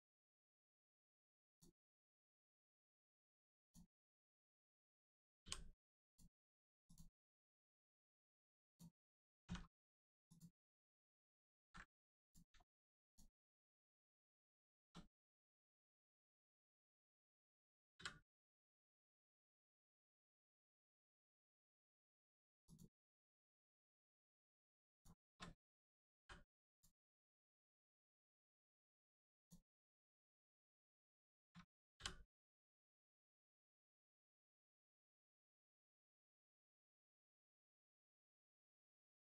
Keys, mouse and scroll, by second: 0.1 middle click, 1.4 click, 3.6 click, 6.8 click, 9.4 x, 10.2 click, 11.2 middle click, 11.5 ctrl+z, 12.2 click, 12.6 shift+middle click, 13.0 click, 14.1 middle click, 14.3 scroll down 1, 14.6 shift+middle click, 15.3 scroll down 1, 15.5 middle click, 16.2 shift+click, 16.5 shift+middle click, 16.9-18.8 scroll down 1, 20.7 click, 21.3 middle click, 21.9 shift+middle click, 22.6 click, 22.7 click, 23.7 middle click, 24.0 shift+middle click, 24.9 shift+click, 26.1 m, 26.7 click, 27.0 middle click, 28.3-29.3 scroll up 1, 29.3 click, 29.7 shift+middle click, 31.0 shift+click, 32.7 click, 33.1 scroll down 1, 33.3 middle click, 34.5 scroll down 1, 35.3 middle click, 36.0 shift+middle click, 36.4 middle click, 36.5 middle click, 38.7 scroll up 1, 39.0 middle click.